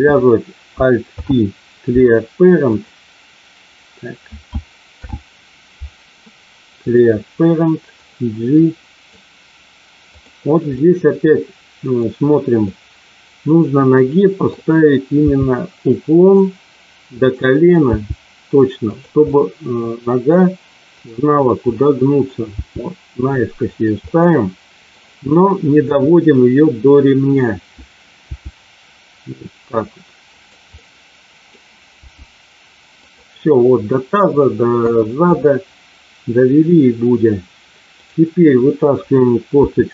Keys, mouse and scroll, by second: 1.1 alt+p, 4.8 alt+p, 7.9-9.1 drag, 10.7-11.9 middle drag, 12.7-14.6 middle drag, 15.2 g, 16.2 click, 17.2 click, 17.8 g, 18.8 click, 19.3 middle click, 20.9 click, 21.7 middle click, 22.4 g, 23.7 click, 24.1 middle click, 25.8 KP_1, 28.3 g, 30.3 click, 30.8 middle click, 31.9 g, 33.1 click, 34.7 KP_1, 39.6 e.